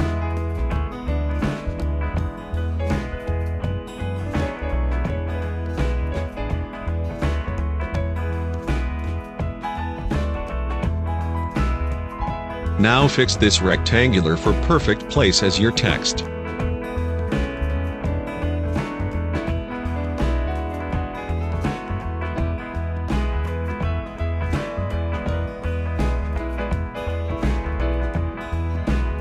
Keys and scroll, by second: 15.1 v, 16.5 ctrl+t, 21.3 space, 28.4 Left.